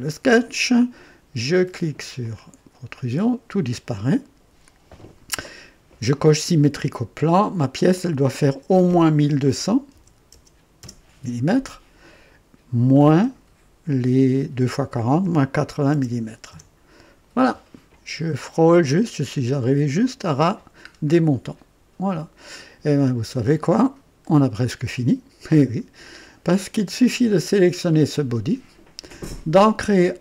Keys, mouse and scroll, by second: 2.2 click, 6.3 click, 7.9 click, 9.5 KP_1, 9.9 KP_2, 10.3 KP_0, 10.8 KP_0, 13.1 KP_Subtract, 15.1 KP_8, 15.8 KP_0, 16.4 Return, 17.5 typing, 18.2 scroll up 1, 18.8-19.7 drag, 19.5-20.2 typing, 20.8 scroll down 1, 21.4-24.4 drag, 27.6 click.